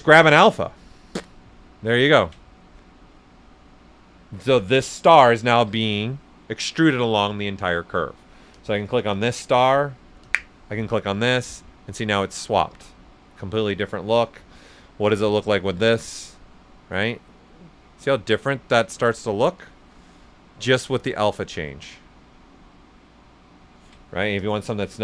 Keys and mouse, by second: 1.5 right click, 2.1 ctrl+right click, 2.4 right click, 8.5 click, 11.7-14.1 right drag, 14.1 click, 16.4 right click, 17.1 right click, 18.1 right click, 19.5 click, 20.5-23.6 right drag, 20.5 typing, 24.4 click.